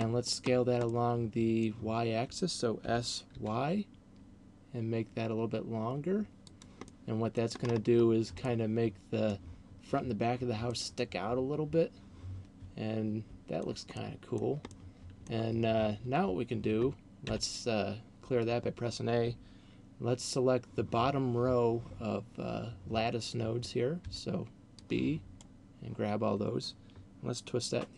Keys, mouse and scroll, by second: 0.3-0.7 scroll down 5, 1.0 middle click, 3.0 s, 6.8 click, 7.0 middle click, 7.8-8.2 scroll up 6, 8.3 middle click, 10.8 middle click, 13.8 middle click, 14.8 middle click, 17.3 a, 24.3 b.